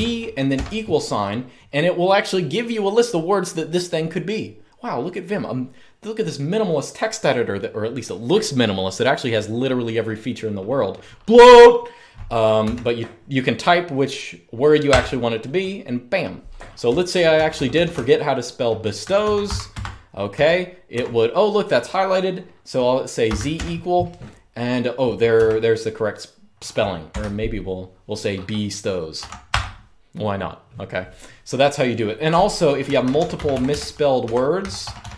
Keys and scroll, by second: 0.0-0.2 typing, 12.3 1, 14.6 Return, 16.3-20.6 typing, 23.0 typing, 25.0 typing, 26.8 typing, 28.9 typing, 29.2 Return, 32.3-35.1 typing.